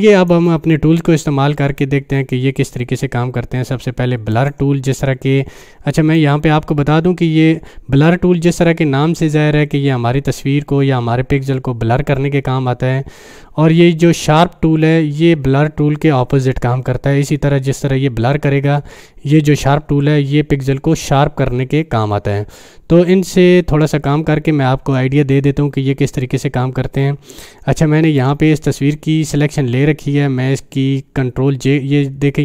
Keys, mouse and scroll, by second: 4.4-6.2 drag, 28.2 click.